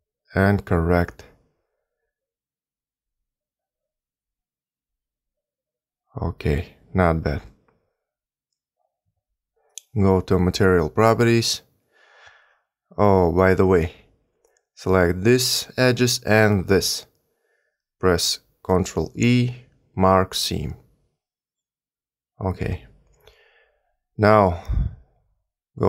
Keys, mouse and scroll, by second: 0.5 g, 4.5 Tab, 7.3 middle click, 8.5 Tab, 10.7 click, 12.3 2, 15.2 alt+click, 18.1 alt+shift+click, 20.7 ctrl+e, 25.0 3.